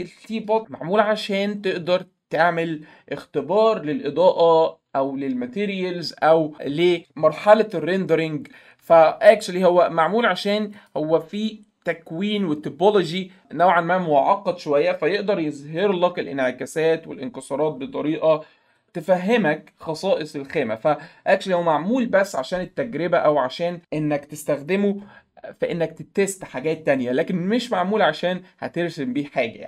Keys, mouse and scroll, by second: 6.8 click, 10.7 click.